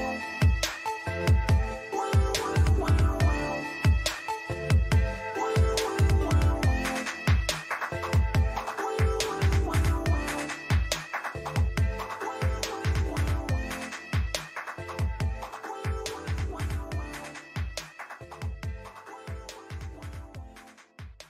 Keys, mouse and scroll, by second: 1.1-4.9 middle drag, 9.9-11.8 drag, 11.2-14.5 middle drag, 13.3 t, 14.5-18.0 drag, 15.7 t, 18.0-20.8 middle drag.